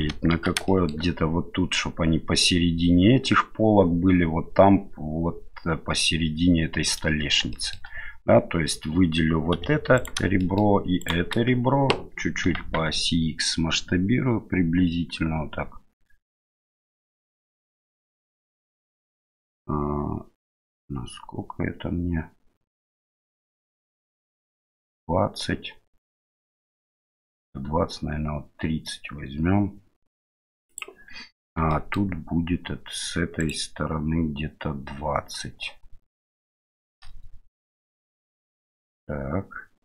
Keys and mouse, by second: 0.7 shift+middle click, 7.5 shift+middle click, 9.5 2, 9.9 right click, 10.4 shift+middle click, 11.0 shift+right click, 12.4 s, 31.8 shift+middle click, 33.4 right click, 36.5-37.5 shift+middle drag.